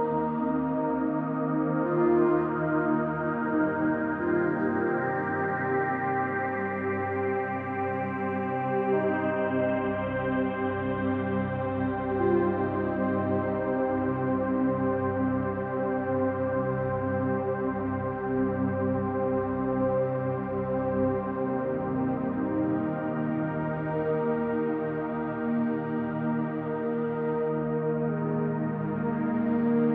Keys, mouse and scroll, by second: 1.5 ctrl+s, 3.2 click, 3.9 click, 4.5 click, 5.8 click, 6.8 click, 7.3 click, 9.1 click, 10.0 click, 12.2 click, 12.4 click, 12.8 click, 13.7 click, 14.0 click, 15.6 typing, 18.0-21.7 typing, 25.2 click, 27.3 click, 29.6 click.